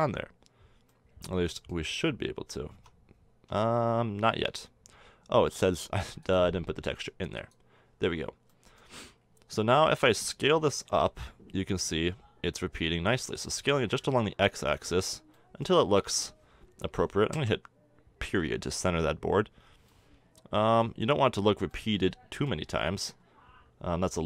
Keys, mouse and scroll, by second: 0.8-2.6 middle drag, 2.7 Tab, 3.5 Tab, 4.2-5.5 middle drag, 7.4 click, 8.1-13.2 middle drag, 10.0 s, 15.1 middle click, 24.1 s.